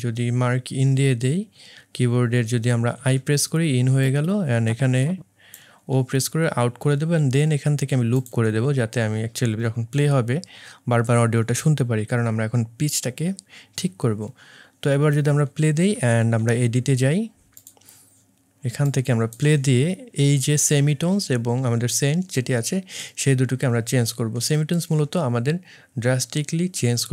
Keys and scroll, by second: 2.9 typing, 5.9 o.